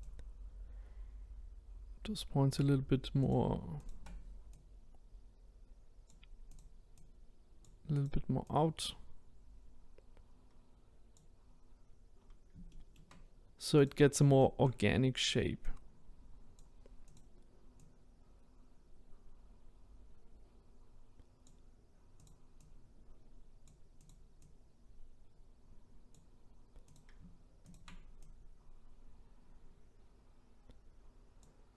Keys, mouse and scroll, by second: 3.3 click, 3.9 shift+click, 6.5 click, 8.0 click, 8.5 click, 12.2-12.7 scroll down 2, 12.7 shift+middle click, 13.3-13.7 scroll up 1, 13.8 click, 14.9 shift+click, 17.1 click, 22.3 click, 22.7 click, 24.5 click, 27.0 click, 27.7 shift+click.